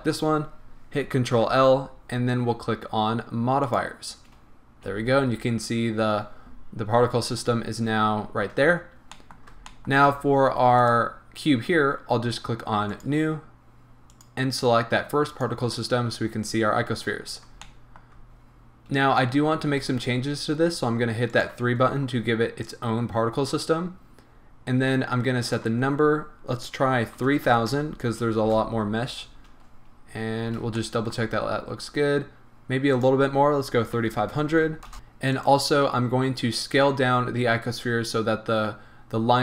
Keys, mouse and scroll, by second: 1.3 ctrl+l, 4.9 a, 9.1-10.8 middle drag, 10.0 scroll up 2, 10.8 click, 12.9 click, 14.1 click, 17.1 scroll up 1, 17.6-21.3 shift+middle drag, 21.3 click, 25.8-30.8 drag, 27.4 KP_0, 28.5 Return, 29.6 scroll down 1, 30.5 a, 30.8-32.9 shift+middle drag, 31.3-32.8 scroll up 2, 32.8 scroll up 1, 32.9-34.9 drag, 34.4 KP_0, 34.9-35.3 shift+middle drag, 35.3 click, 36.0-37.8 scroll down 2, 37.8-39.4 scroll down 1.